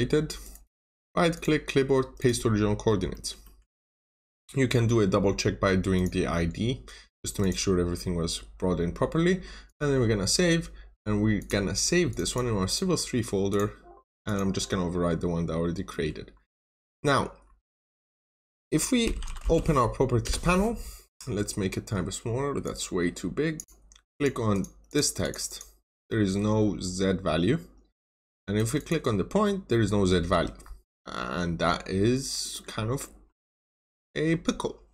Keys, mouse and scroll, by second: 0.3 right click, 1.2 click, 3.0 middle click, 4.1-4.8 scroll up 1, 5.8 click, 12.1 double click, 13.4 click, 15.5 scroll down 1, 15.8 middle click, 16.2 scroll up 1, 16.5 scroll down 1, 16.8 middle click, 17.3 scroll up 1, 18.7-20.6 typing, 18.9 scroll up 1, 20.1 Return, 22.5 click, 24.4 double click, 26.0 middle click, 26.7 scroll down 1, 27.8 Escape, 28.4 click, 28.7 double click, 29.9 scroll down 1, 30.2 Escape, 30.5 scroll down 1, 30.8 middle click, 31.4-31.7 scroll up 1, 31.7-32.3 scroll down 1, 32.3 middle click, 34.1 scroll up 1.